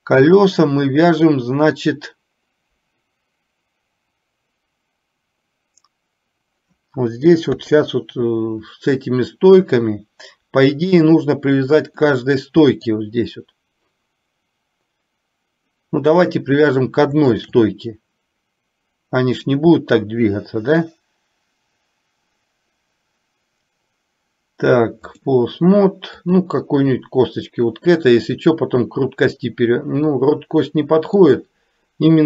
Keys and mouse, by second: 0.0-1.4 middle drag, 7.6 KP_3, 12.2 middle click, 19.5-25.5 drag, 30.2-31.3 middle drag.